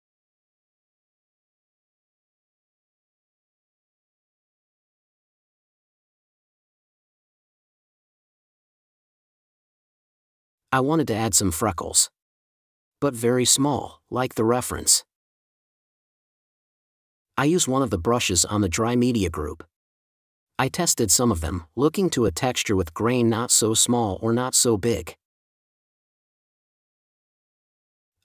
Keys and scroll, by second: 1.3 n, 3.0 4, 4.4 super+space, 5.6 space, 7.7 super+e, 8.0 super+s, 10.2 super+z, 11.4 space, 12.0 super+z, 14.3 super+z, 15.4 super+z, 16.8 super+z, 17.4 shift+super+n, 18.3 super+z, 20.5 super+z, 21.4 super+z, 23.9 space, 25.0 5, 27.5 space.